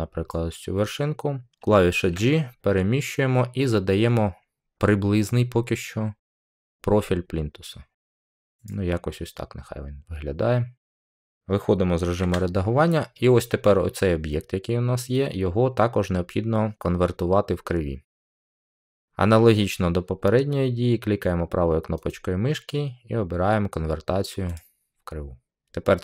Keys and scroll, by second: 1.9 g, 12.1 Tab.